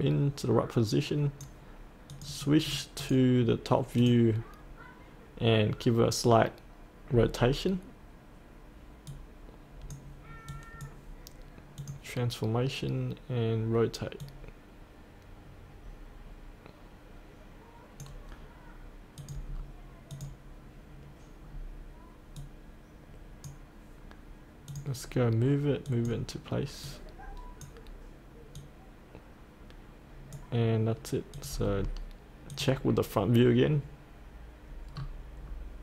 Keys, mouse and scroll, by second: 7.3 scroll down 1, 9.1-19.5 drag, 19.5-20.1 scroll down 1, 20.1 click, 21.5-22.4 scroll down 1, 22.4-31.7 drag, 31.7-32.5 scroll down 1, 32.5 click, 35.0-35.4 scroll down 1, 35.4-35.8 scroll up 1.